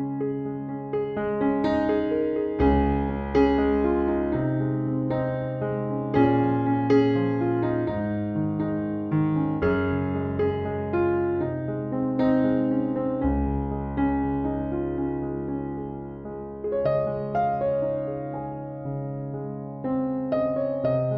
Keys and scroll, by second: 5.8-6.6 typing, 19.2 typing.